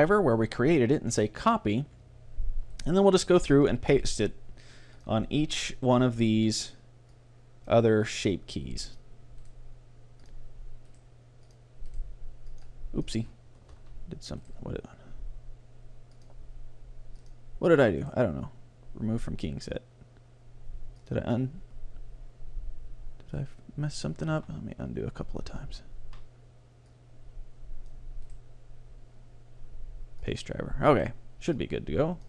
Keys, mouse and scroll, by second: 2.8-7.5 right drag, 7.1-8.7 drag, 8.1 right click, 9.1-12.8 right drag, 13.7 click, 16.2-19.0 drag, 18.1-19.9 right drag, 23.5-25.3 drag, 24.4 ctrl+z, 25.7 ctrl+z, 26.9-28.6 drag, 28.3-30.2 right drag, 28.7 middle click, 31.0-32.2 right drag.